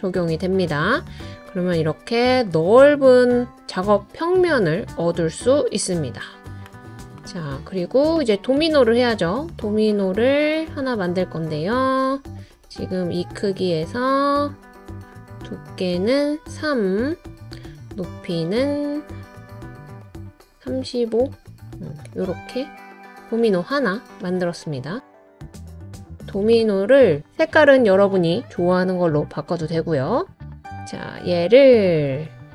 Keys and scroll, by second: 9.0 typing, 12.5 typing, 26.9 typing, 32.2 typing.